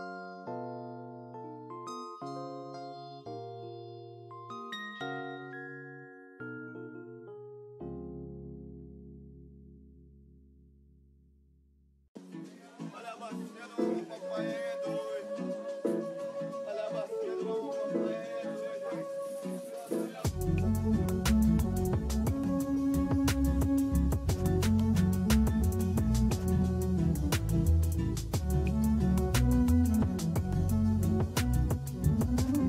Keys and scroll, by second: 1.3 space, 2.4 space, 3.1 space, 3.7 space, 5.2 space, 5.8 space, 7.0 space, 10.0 space, 12.3 space, 13.2 space, 14.2 space, 17.3 space.